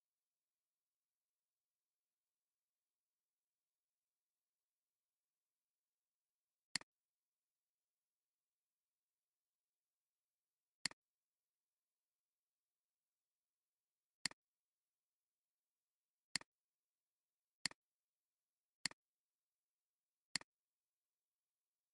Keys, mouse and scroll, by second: 6.8 right click, 14.2 click, 16.4-17.8 right drag.